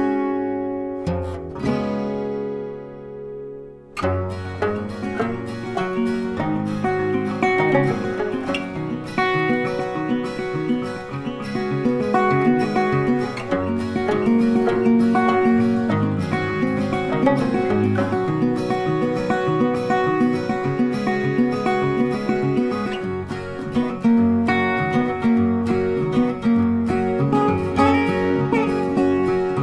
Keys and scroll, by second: 10.8 ctrl+t.